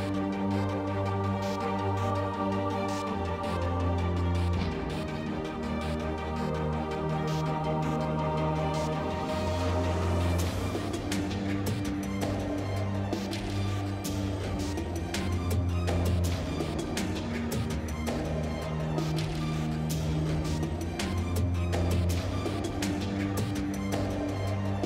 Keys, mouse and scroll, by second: 0.2 a, 0.3 a, 1.0 shift+e, 1.5 Tab, 2.4 Tab, 2.7 a, 2.8 a, 3.3 ctrl+n, 3.5 Tab, 5.7 z, 6.1 z, 7.5 Tab, 9.3 g, 9.9 Tab, 10.2 z, 10.8 z, 11.4 Tab, 13.1 g, 13.8 Tab, 14.2 a, 14.5 Tab, 14.7 Tab, 15.8-16.5 middle drag, 17.1 t, 18.2 t, 18.8 Tab, 21.1 ctrl+Tab.